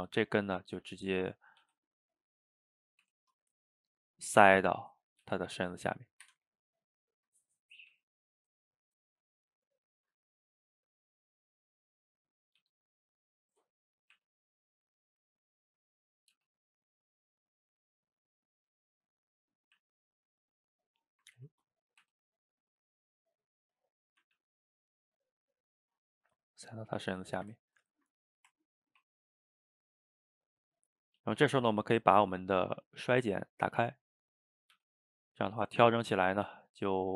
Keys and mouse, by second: 0.0-1.3 middle drag, 1.3 click, 1.6 g, 4.2-5.2 middle drag, 5.2 g, 6.5-7.1 middle drag, 7.1 shift+click, 7.3-7.9 middle drag, 7.9 g, 9.9-12.6 middle drag, 12.6 g, 14.0 drag, 14.1 e, 15.5-16.2 middle drag, 16.2 click, 16.4 g, 18.0-18.6 middle drag, 18.6 g, 19.5 middle click, 19.8 e, 21.4 ctrl+z, 21.7 click, 22.0 e, 24.0 shift+click, 24.4 g, 25.5-27.4 middle drag, 27.4 shift+right click, 27.6-28.9 ctrl+shift+middle drag, 28.9 ctrl+t, 31.3-33.4 shift+middle drag, 33.4 click, 34.0 middle click, 34.6 click, 34.8 g, 36.3 click, 36.5 g.